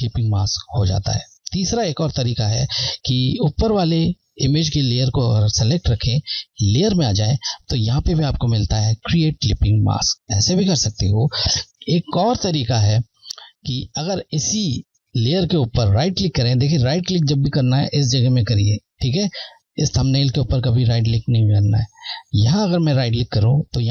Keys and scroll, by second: 1.9 z, 7.0 Left, 9.7 typing, 12.1 ctrl+z, 22.7 Right, 23.1 typing.